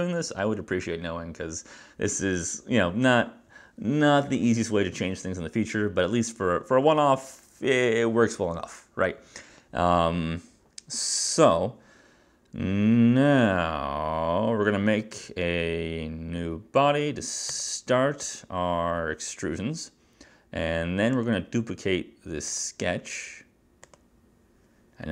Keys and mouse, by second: 21.3 click, 22.6 click, 24.0 click.